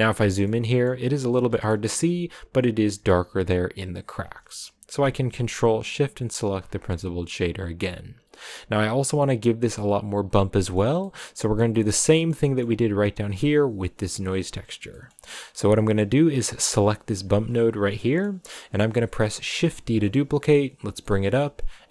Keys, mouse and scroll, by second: 0.2 shift+middle click, 0.8-1.4 scroll up 2, 1.4-2.4 shift+middle drag, 2.4-4.0 scroll up 2, 5.7 ctrl+shift+click, 6.6 scroll down 5, 6.9-8.2 middle drag, 8.2 scroll up 2, 10.5-12.8 middle drag, 12.8-13.5 scroll up 5, 13.5-17.1 drag, 17.7-18.2 scroll down 4, 18.2-19.7 middle drag, 19.7 shift+d, 21.5 middle click.